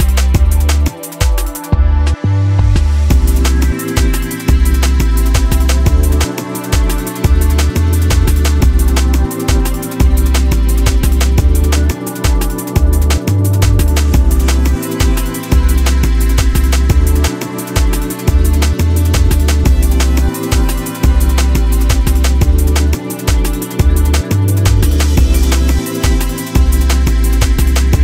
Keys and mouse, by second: 0.0-2.4 shift+drag, 1.1 g, 3.3-4.5 drag, 5.5-7.3 drag, 8.1 space, 9.4-9.9 drag, 10.4-11.3 drag, 12.2-13.7 drag, 14.4-15.3 drag, 16.7 space, 18.3 click, 19.7 click, 20.1 click, 22.1 right click, 23.8-28.0 drag.